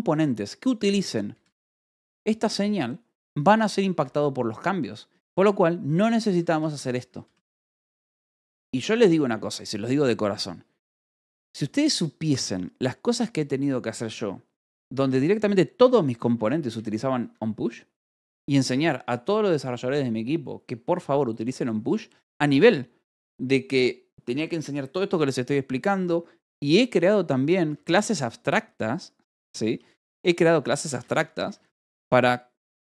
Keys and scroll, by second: 1.8 shift+v, 3.8 Escape, 5.1-6.8 typing, 7.8 ctrl+s, 10.9 k, 11.2 o, 16.6 BackSpace, 17.1 Escape, 27.5 k, 28.1 j, 28.7 h, 30.8 l, 31.3 k, 31.9 j.